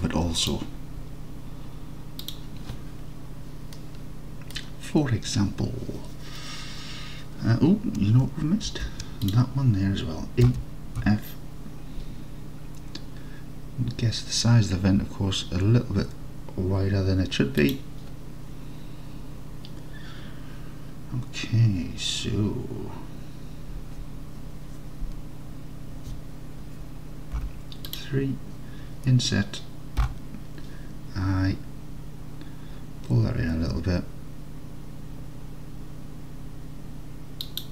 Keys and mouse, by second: 3.9 click, 8.7 ctrl+r, 10.5 e, 11.1 f, 17.7-27.5 drag, 27.5 3, 27.9-30.1 drag, 30.1 i, 37.5 click.